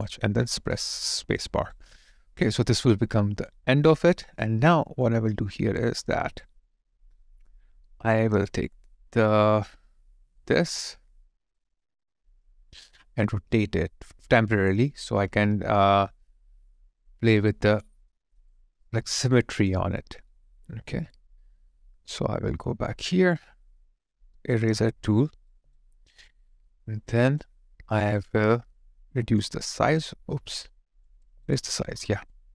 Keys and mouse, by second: 0.7 space, 1.4 alt+right click, 1.8 alt+click, 4.2 alt+click, 5.3 alt+right click, 6.8 alt+click, 14.7 ctrl+click, 15.6 ctrl+click, 17.1 ctrl+click, 18.1 alt+middle click, 18.5 alt+click, 25.5 alt+right click, 25.9 alt+middle click, 26.5 alt+click, 31.2 alt+right click.